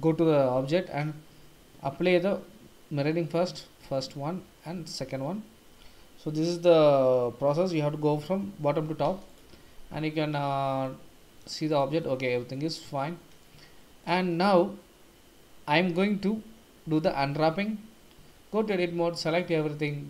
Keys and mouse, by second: 3.9 ctrl+a, 5.0 ctrl+a, 9.5 Tab, 10.8 Tab, 10.8 drag, 11.0-11.4 middle drag, 12.0-12.5 middle drag, 12.7 click, 13.8 shift+click, 13.8 shift+middle drag, 14.3 middle click, 18.2 Tab, 18.8 a.